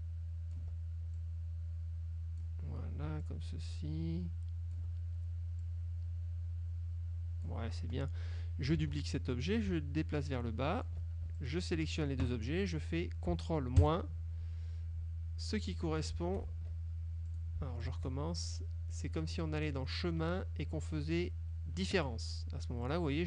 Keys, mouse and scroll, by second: 1.2-2.7 ctrl+drag, 3.3-5.0 ctrl+drag, 5.7-7.8 drag, 8.9 ctrl+d, 9.6-11.2 ctrl+drag, 11.5 ctrl+shift+click, 13.9 ctrl+KP_Subtract, 16.6 ctrl+shift+z, 17.4 click, 18.0 shift+click, 19.6 click, 22.0 click, 23.0 click.